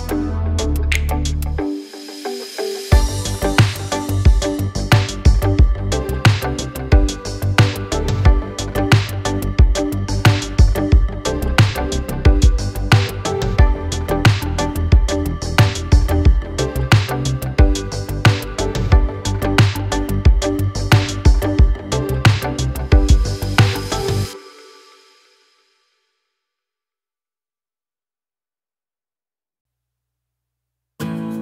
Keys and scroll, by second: 0.6 space, 1.9 m, 3.5 space, 4.5 l, 9.0 space, 10.2 l, 11.7 space, 12.7 Delete, 14.1 l, 15.7 2, 16.0 Return, 18.4 space, 18.9 a, 21.1 space, 22.3 a, 27.6 space, 29.8 Delete.